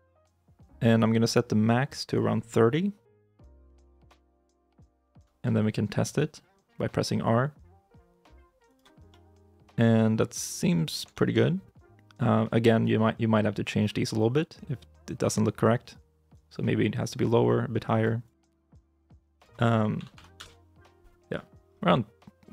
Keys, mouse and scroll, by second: 3.1 3, 3.5 Return, 4.8 shift+middle click, 5.2-6.1 scroll up 1, 6.1 r, 8.9 scroll up 1, 8.9 middle click, 10.5 scroll up 1, 11.0 shift+middle click, 19.8 typing, 20.2 Return, 21.2 middle click, 21.5 scroll down 1.